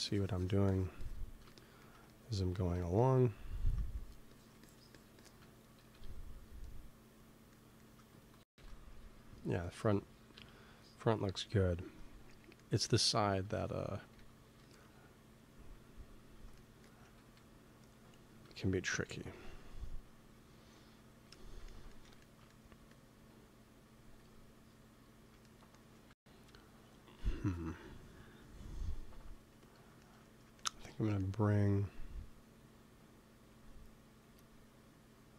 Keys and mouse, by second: 1.4-2.7 drag, 3.9-5.7 drag, 5.7 KP_1, 8.3 ctrl+s, 10.2 KP_3, 14.1 g, 14.3 f, 14.9-17.8 drag, 17.1 ctrl+s, 21.2 middle click, 22.6 f, 23.4 click, 23.9 f, 26.0 ctrl+s, 26.3 click, 29.9-32.3 middle drag, 33.4 f, 34.1 f, 34.6-35.3 drag.